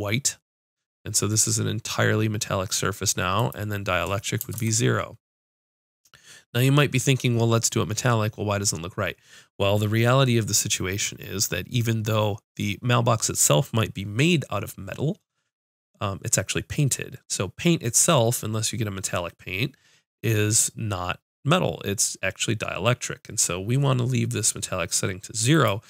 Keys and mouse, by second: 3.4-24.9 drag.